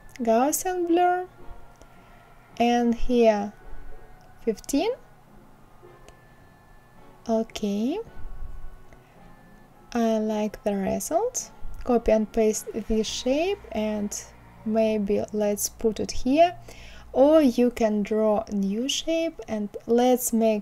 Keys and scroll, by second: 2.6 KP_1, 2.9 KP_5, 4.2 Return, 10.2 ctrl+c, 10.5 ctrl+v, 18.5 KP_1, 18.8 KP_5, 19.1 Return.